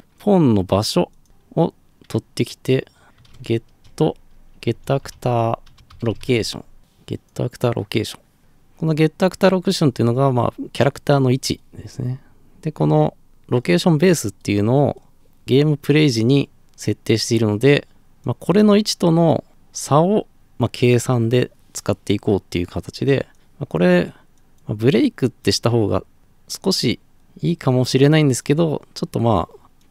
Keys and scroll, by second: 2.9-6.9 typing.